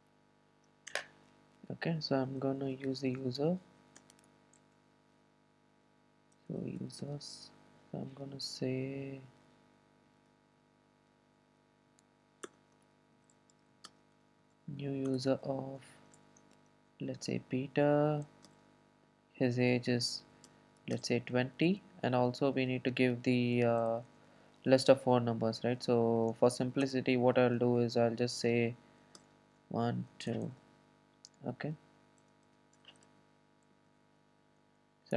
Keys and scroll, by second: 4.6 Escape, 15.1 Return, 25.0 Return, 33.8 super+d.